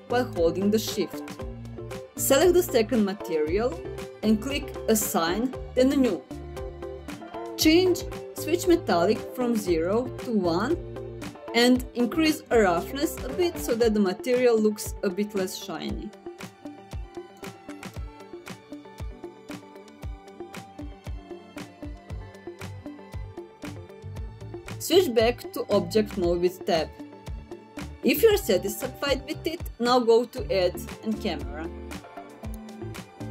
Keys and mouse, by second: 2.3 click, 4.3 click, 5.3 click, 9.3-10.1 drag, 19.4-23.3 drag, 25.9 Tab, 29.0-30.5 middle drag, 31.3-32.9 drag.